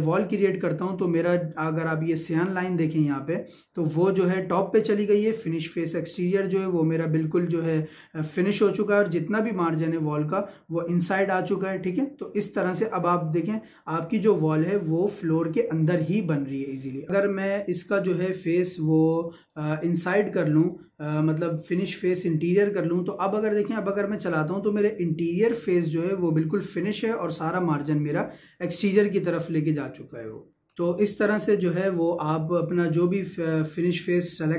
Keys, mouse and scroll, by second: 22.9 click, 24.8-34.5 middle drag.